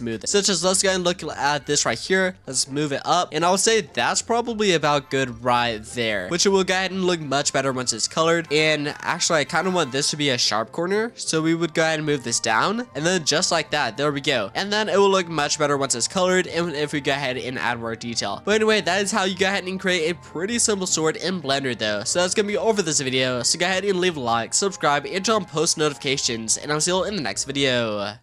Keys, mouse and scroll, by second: 0.2-2.4 shift+middle drag, 2.4-5.0 drag, 6.3 click, 6.3-6.9 scroll down 2, 6.9-8.5 middle drag, 8.5 scroll down 1, 8.7 scroll up 2, 9.0-9.3 middle drag, 9.3 scroll down 1, 9.5-11.4 scroll up 2, 11.4-12.6 drag, 12.7 scroll down 4, 12.9-14.3 shift+middle drag, 14.3-15.6 scroll up 2, 15.6-17.1 middle drag, 17.1-18.0 scroll down 3, 18.0-20.9 middle drag, 21.6-22.0 scroll up 1, 22.0-26.9 shift+middle drag, 26.9-28.2 scroll up 2.